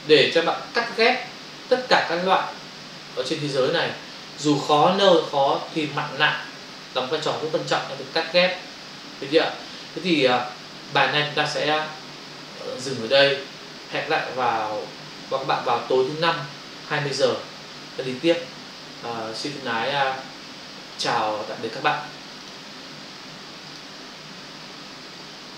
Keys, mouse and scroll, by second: 10.9 click, 13.0 click, 13.1 click, 22.4 click, 22.5 click.